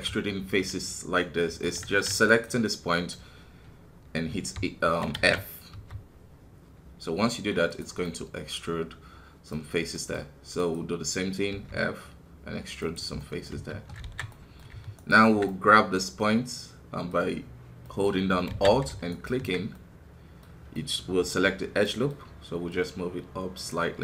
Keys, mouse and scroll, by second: 2.2 right click, 2.9-4.4 middle drag, 4.4 e, 8.0-10.6 middle drag, 10.6 right click, 11.5 f, 13.2 middle click, 13.5 KP_1, 14.0 alt+a, 14.3-18.5 middle drag, 18.5 alt+a, 19.1 alt+right click, 20.0-22.7 middle drag, 22.7-24.0 drag.